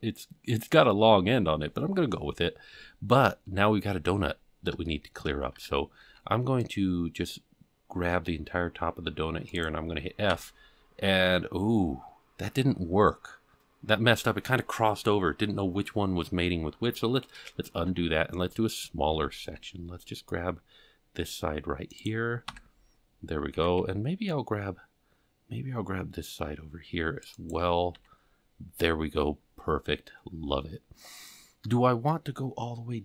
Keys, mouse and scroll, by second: 4.9 shift+middle click, 5.6 alt+a, 6.1 c, 10.3 f, 17.8 ctrl+z, 19.2 alt+a, 19.4 c, 23.3 f, 23.6 alt+a, 23.8 c, 28.0 f, 31.4 scroll down 1.